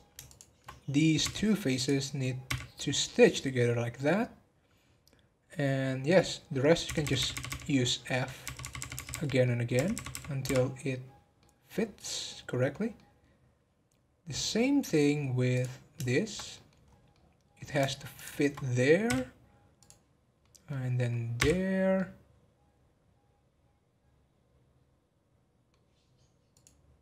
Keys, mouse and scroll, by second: 0.2 shift+click, 1.2 f, 1.7 click, 3.1-6.1 middle drag, 6.5 middle click, 6.8-7.6 f, 7.6 middle click, 8.4-9.0 f, 9.4 middle click, 9.7 f, 11.4 middle click, 11.7 scroll down 1, 12.1-14.5 middle drag, 14.5 scroll up 3, 15.5 click, 16.0 shift+middle click, 16.8 scroll up 2, 17.1-18.1 middle drag, 18.1 shift+click, 19.0 f, 19.7 click, 20.1 scroll down 2, 20.4-21.4 middle drag, 21.4 f, 21.9-25.1 middle drag, 26.5 click.